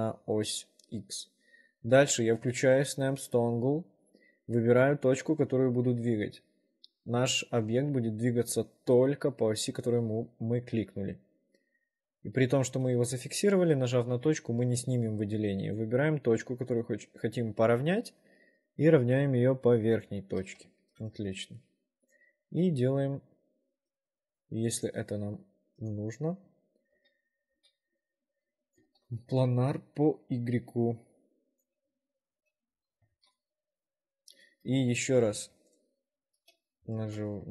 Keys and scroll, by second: 2.1 s, 21.0 ctrl+r, 27.1 w, 27.7 s, 29.1 ctrl+r, 32.4 shift+5, 33.3 ctrl+r, 34.9 w, 35.5 4, 37.0 shift+5.